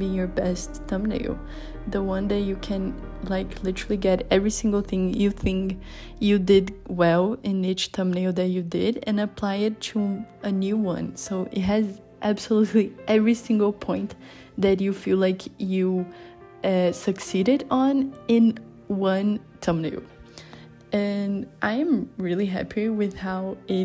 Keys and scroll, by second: 5.9 i, 6.3 b, 8.1 i, 10.3 i, 10.9 b, 21.7 [, 22.0 b, 22.9 [, 23.7 b.